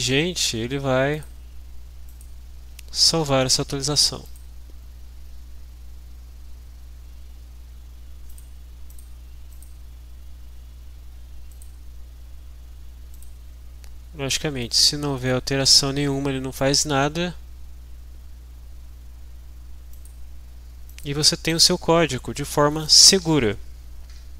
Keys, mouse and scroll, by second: 1.1 click, 2.2 click, 4.2 click, 8.5 click, 9.0 click, 9.5 click, 11.5 click, 13.1 click, 14.8 click, 15.3-15.8 drag, 20.1 click, 20.9 click, 21.5 click.